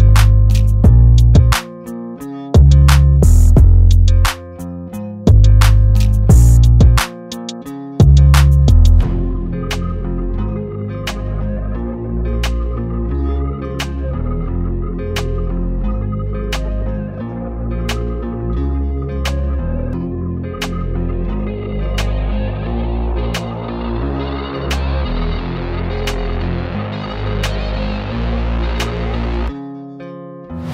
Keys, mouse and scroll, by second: 0.7 space, 2.6 click, 4.5-6.1 drag, 13.4-14.6 drag, 16.8-17.4 drag, 23.5 ctrl+space, 24.1 ctrl+alt+click, 24.5 space, 24.8 click, 25.0-25.4 space, 26.0-26.4 space.